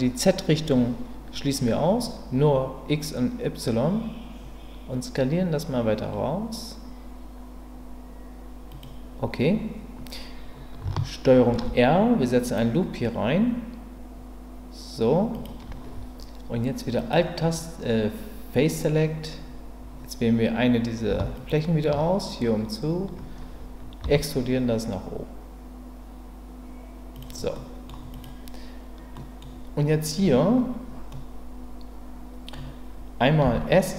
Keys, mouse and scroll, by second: 8.7 click, 11.5 ctrl+r, 15.3 click, 17.1 click, 21.4 alt+click, 24.0 e, 27.1 click, 27.7 middle click, 29.1 middle click, 31.1-32.5 middle drag, 33.4 s.